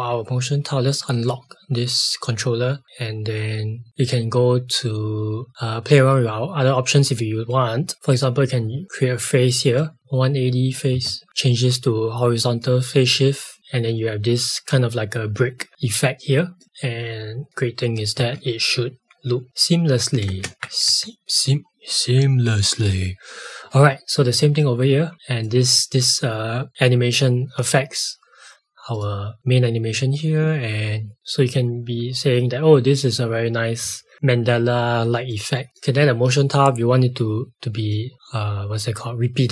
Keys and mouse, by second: 0.9 click, 7.9 click, 10.0 KP_0, 10.9 KP_Enter, 12.4 click, 16.6 click, 18.1 space, 20.5 Left, 21.1 space, 24.6 click, 28.9 click, 35.2 click.